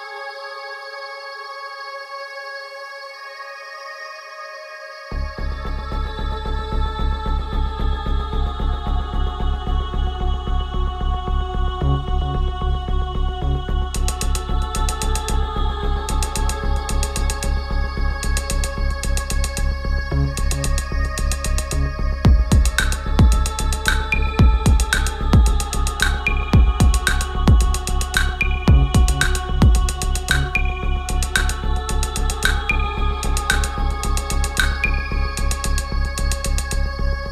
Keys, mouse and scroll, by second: 2.9 Down, 4.0 click, 4.3 Down, 7.3-14.0 drag, 15.6 Return, 17.6-20.7 drag, 22.8-23.8 scroll up 1, 23.8 click, 25.4 click, 26.4 shift+click, 34.3-37.3 drag.